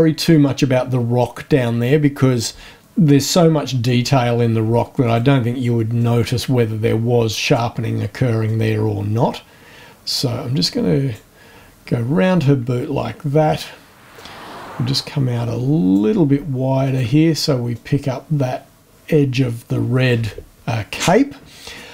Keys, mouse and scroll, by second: 5.0 ctrl+click, 5.9-7.7 drag, 8.5-11.3 drag, 14.1-16.1 drag, 16.8 ctrl+click, 17.7-18.9 drag.